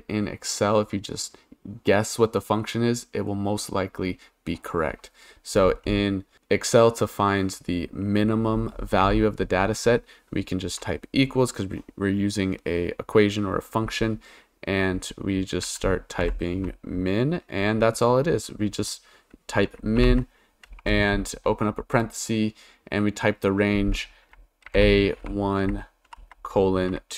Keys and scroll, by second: 9.0 =, 15.6 m, 16.2 i, 16.5 n, 20.0 shift+9, 20.7 BackSpace, 24.7 shift+a, 25.2 1, 26.1 shift+;.